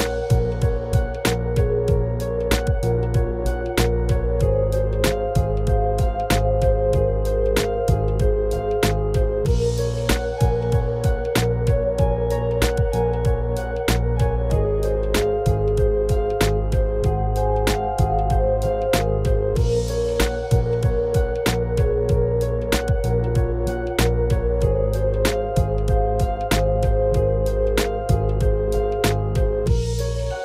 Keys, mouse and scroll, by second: 0.8 Tab, 2.1 g, 6.9 Tab, 8.1 click, 9.5 click, 10.1 alt+shift+click, 11.7 click, 12.3 scroll up 1, 13.3 e, 18.0 ctrl+r, 21.2 Tab, 22.9-28.1 drag, 29.0-30.4 drag.